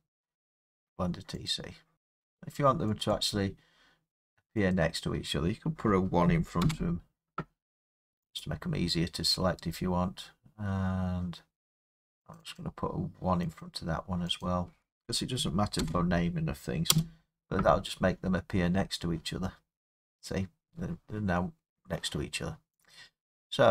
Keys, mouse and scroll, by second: 1.5 click, 1.9-3.0 scroll, 3.0 click, 3.3 click, 4.7 click, 6.2 1, 7.5-8.4 scroll, 8.4 click, 8.7 middle click, 8.7 middle click, 12.4 click, 12.6 click, 13.6 click, 14.4 click, 15.4 1, 16.9 Return, 18.3-19.3 scroll, 22.8 click.